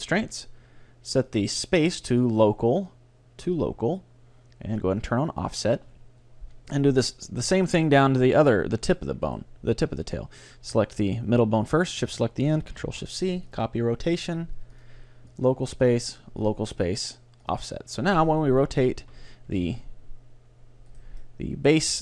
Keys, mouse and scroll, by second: 5.4-7.2 drag, 7.6-10.9 right drag, 12.0 right click, 12.8 ctrl+shift+c, 14.8-19.0 drag, 18.3 right click, 19.5 r, 21.0-22.0 right drag, 21.2-22.0 drag, 21.9 r.